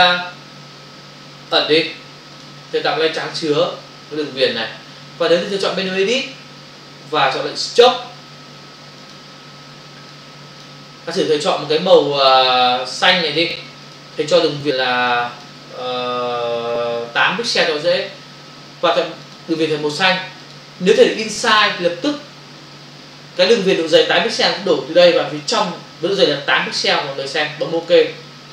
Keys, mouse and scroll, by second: 1.4 click, 2.4 click, 3.7 Return, 5.8 click, 9.0 click, 10.1 click, 11.2 click, 13.0 click, 13.8 click, 15.2 click, 19.3 click, 20.4 click, 27.8 click.